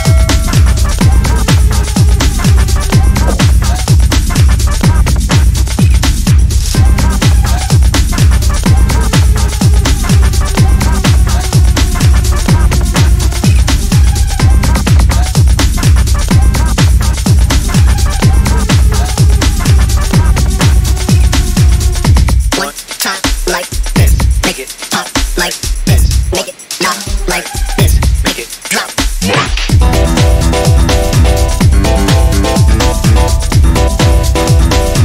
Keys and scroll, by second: 8.2 ctrl+z, 16.4-17.3 typing, 21.6-22.5 typing.